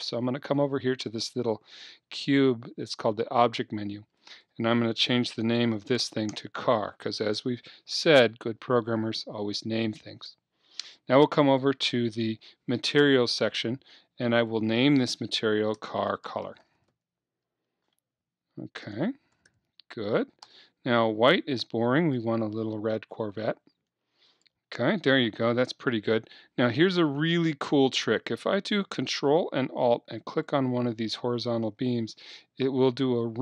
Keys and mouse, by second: 4.2-6.2 drag, 11.4-16.4 drag, 22.0-24.9 drag, 30.2-32.2 right drag, 32.2-33.4 middle drag.